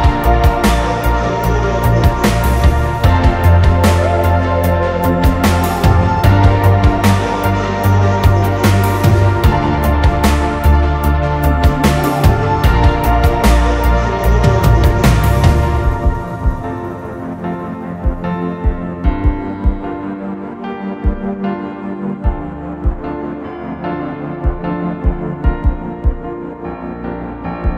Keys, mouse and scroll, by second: 0.1 double click, 25.2 ctrl+click, 26.5-27.7 scroll down 1.